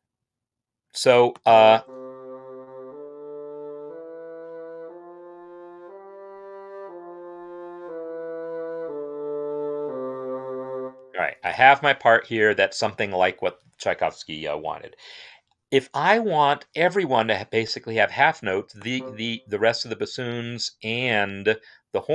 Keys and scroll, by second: 1.7 space, 10.7 space.